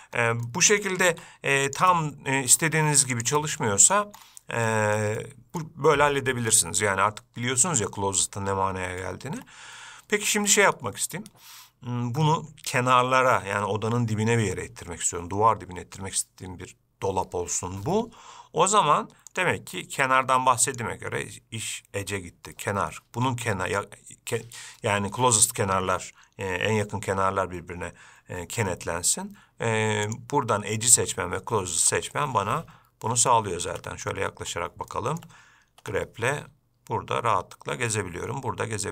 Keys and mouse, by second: 0.7 middle click, 1.3 g, 2.1-2.8 middle drag, 3.0 g, 3.6-4.1 middle drag, 4.9 shift+middle drag, 5.4 middle click, 9.2-9.6 shift+middle drag, 19.5-22.8 drag, 30.4-31.6 drag, 32.0 g, 35.1 shift+middle drag, 36.0 g.